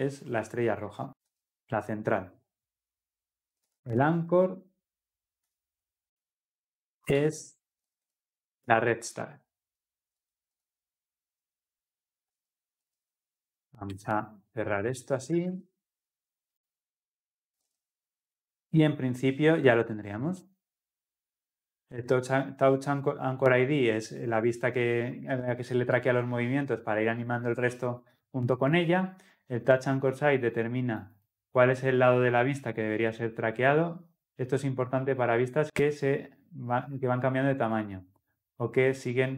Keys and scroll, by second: 5.6 Return, 12.8 ctrl+z, 13.9 ctrl+z, 15.3 alt+Return, 15.4 ctrl+alt+l, 15.7 ctrl+alt+o.